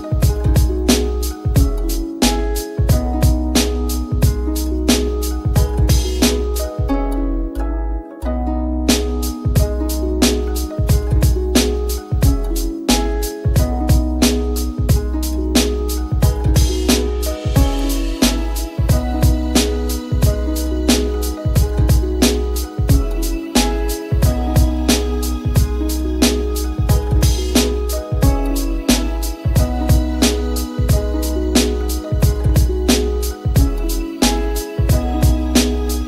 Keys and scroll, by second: 27.9 t.